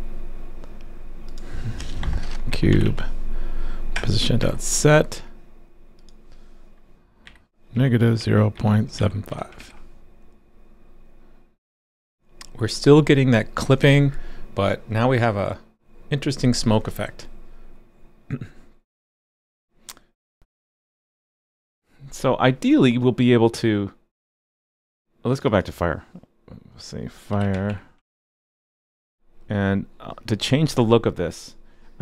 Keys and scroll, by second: 9.6 super+s, 24.6-25.4 typing, 28.0 super+s.